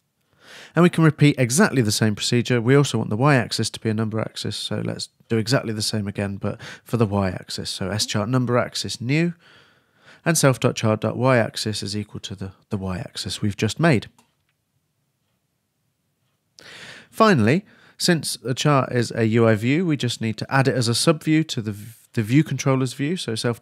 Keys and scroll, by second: 0.3 shift+Return, 0.4 shift+s, 1.0 shift+c, 1.6 shift+Return, 2.3-4.7 typing, 7.2-8.6 typing, 14.2 shift+a, 14.5 shift+Return, 23.0-23.6 typing.